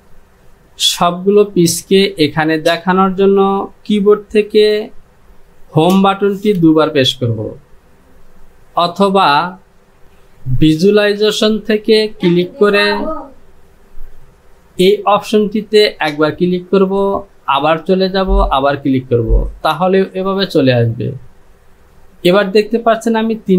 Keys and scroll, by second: 5.9 Home, 6.5 Home.